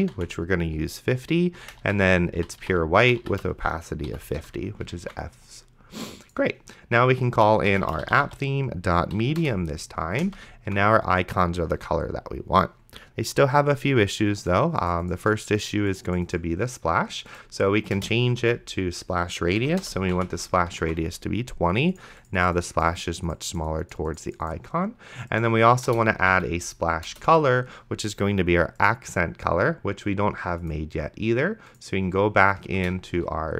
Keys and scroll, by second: 0.0-0.7 typing, 1.9 shift+f, 4.1 End, 4.4 ;, 5.3 ctrl+s, 7.5-8.8 typing, 9.2 Down, 9.4 Return, 10.5 ctrl+s, 18.0-20.7 typing, 19.6 Down, 21.1 ctrl+s, 26.0-26.8 typing, 27.1 Return, 33.1 Return.